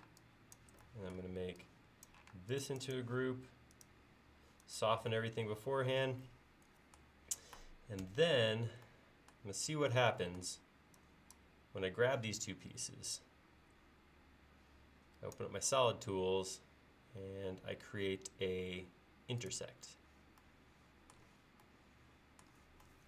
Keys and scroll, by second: 2.4 space, 8.1 ctrl+s.